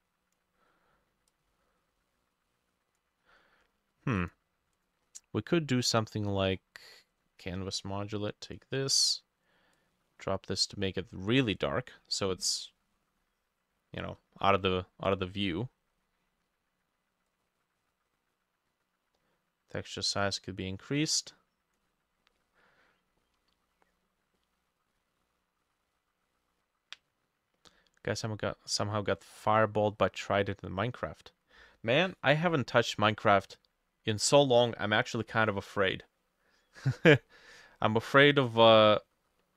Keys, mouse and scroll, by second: 5.1-5.6 scroll up 1, 6.2-7.4 scroll down 7, 8.6 scroll down 4, 12.2 middle click, 12.3-12.6 scroll down 1, 12.7 middle click, 22.4 middle click, 23.2-23.7 scroll down 1, 24.4 middle click, 29.2 middle click, 37.5 middle click, 38.2 middle click, 38.8 middle click.